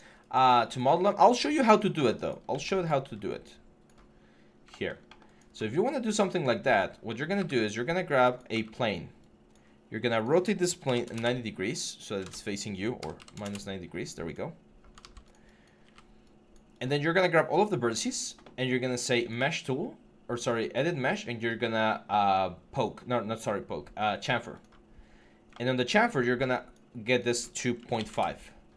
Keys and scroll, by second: 7.2 w, 8.3 e, 10.6 typing, 10.9 Return, 12.8 -, 13.0 9, 13.1 0, 13.2 Return, 14.8 ctrl+z, 27.9 Return.